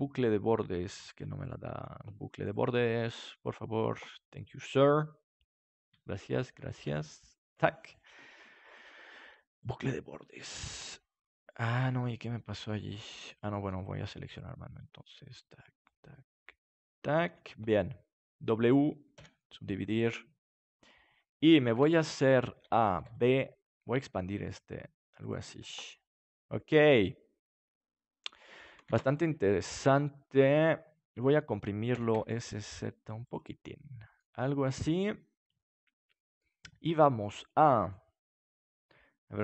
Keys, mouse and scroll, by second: 1.4-2.4 right drag, 3.4-5.0 drag, 5.0-6.2 middle drag, 6.2-7.8 right drag, 7.8 click, 7.9 right click, 9.6-11.7 drag, 11.7 ctrl+z, 13.1-14.3 middle drag, 14.3 click, 14.3-18.4 right drag, 17.7 click, 18.4 middle click, 19.1 click, 19.1 w, 21.7 KP_3, 22.5 a, 22.9 b, 24.0 s, 25.3-27.1 drag, 25.5 Tab, 28.8 ctrl+s, 31.9 s, 33.3-35.1 drag, 36.2-37.7 middle drag.